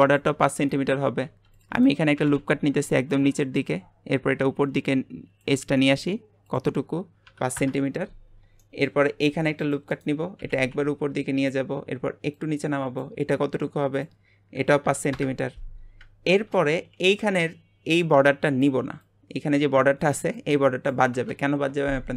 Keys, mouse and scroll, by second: 1.3 ctrl+r, 2.1 g, 3.4 shift+middle click, 3.7-4.6 scroll up 1, 4.6 click, 6.4-8.6 drag, 8.6-9.3 shift+middle drag, 9.3 ctrl+r, 10.4 g, 12.3 click, 13.4-13.9 scroll up 1, 13.9-15.8 drag, 15.8 scroll down 2, 16.3-21.4 shift+middle drag.